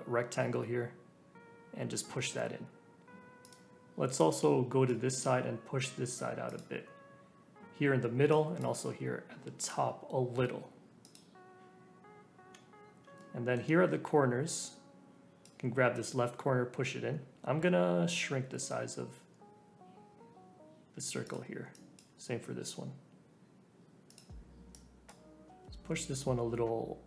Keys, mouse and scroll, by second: 4.1 click, 5.3 g, 8.3 click, 8.7 g, 13.2-14.5 shift+middle drag, 14.5 click, 16.0 g, 21.7 click, 22.0 g, 24.7 click, 25.4 g.